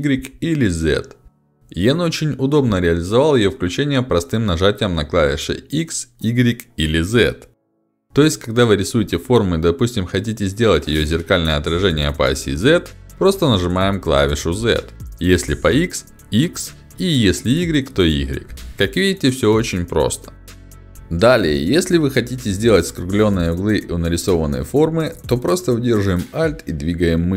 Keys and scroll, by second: 1.3 ctrl+alt+x, 4.6 h, 11.8 z, 15.6 x.